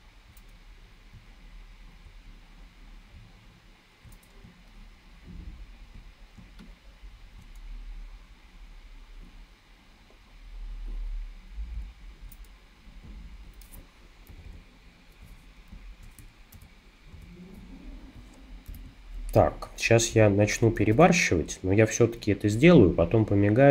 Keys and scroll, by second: 6.4 space, 14.3 super+-, 14.5 super+-, 15.7 space, 16.5 super+-, 17.2 super+=, 18.7 super+-, 20.8 shift+super+n.